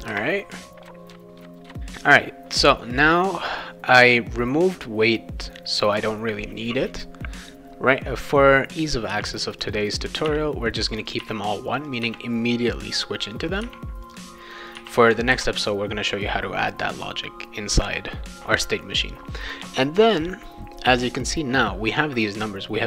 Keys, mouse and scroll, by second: 0.9 click, 1.1 Return, 1.4 v, 2.9 click, 3.1 click, 9.1 1, 9.6 click, 9.8 click, 10.3 scroll down 2, 10.3 1, 10.9 click, 11.1 click, 11.2 1, 11.6 click, 11.9 click, 11.9 1, 13.3 click, 13.5 click, 13.6 1, 14.1 click, 14.4 click, 14.8 1, 15.3 ctrl+s.